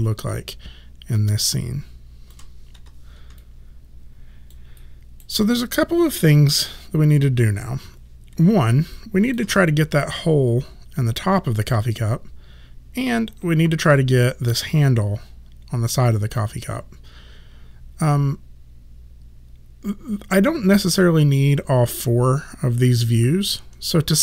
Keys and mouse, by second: 1.2 alt+click, 2.8 f, 3.4 alt+click, 4.8 alt+right click, 9.0 alt+click.